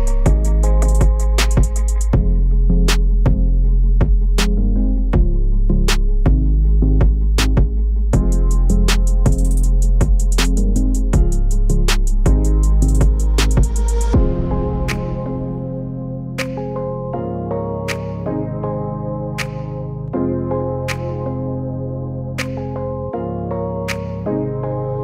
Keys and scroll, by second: 0.0-25.0 typing.